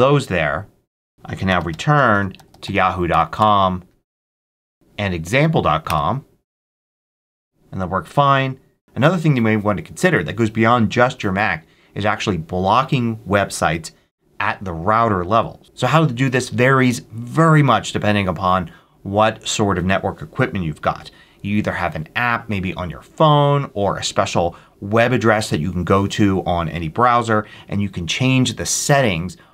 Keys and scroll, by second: 1.1-3.1 typing, 3.3 Return, 4.7 super+v, 5.8 Return.